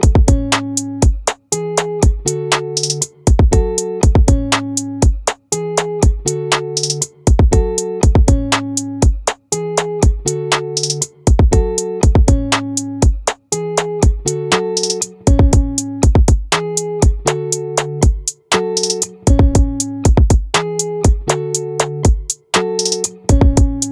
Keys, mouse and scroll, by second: 0.5-1.5 middle drag, 2.7 middle click, 3.7-8.4 middle drag, 10.3-12.3 middle drag, 13.7-14.7 middle drag, 14.7-19.4 drag, 21.8 ctrl+r.